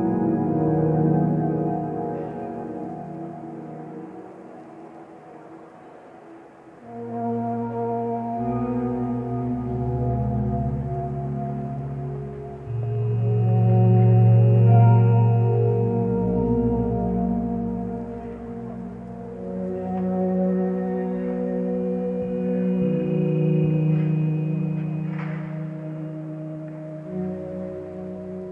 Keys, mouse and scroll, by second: 1.2 ctrl+z, 8.9 ctrl+space, 10.1 click, 11.3 ctrl+space, 11.3 click, 12.6 click, 13.2 ctrl+space, 14.0 click, 14.4 ctrl+space, 14.4 click, 16.3 ctrl+j, 16.5 ctrl+j, 16.7 ctrl+j, 16.8 ctrl+j, 17.0 ctrl+j, 27.0-27.6 BackSpace, 28.1 click.